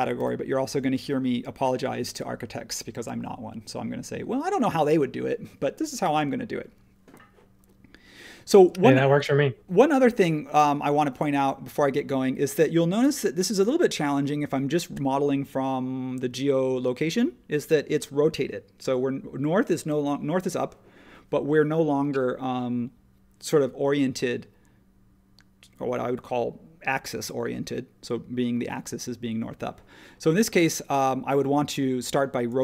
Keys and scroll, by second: 0.1 h, 8.3 space.